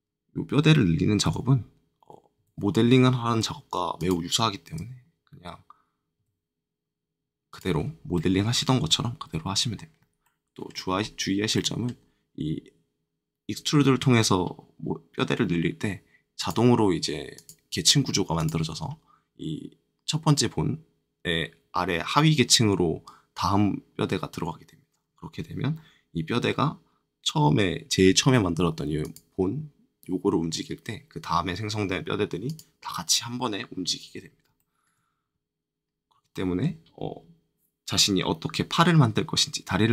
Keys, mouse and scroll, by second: 1.2 e, 2.3 z, 3.9 click, 4.6 click, 6.1 click, 8.1 middle click, 8.9 shift+middle click, 8.9 shift+middle click, 9.3-9.9 scroll down 2, 10.9 middle click, 10.9-11.5 scroll up 3, 11.5 middle click, 11.9-14.4 scroll down 3, 14.4-15.5 scroll down 1, 15.5-15.8 scroll down 1, 16.3-21.3 drag, 29.0 click, 32.4 click, 34.1-34.4 scroll up 2, 34.5 shift+middle click, 35.8-36.2 scroll down 1, 36.3 shift+middle click.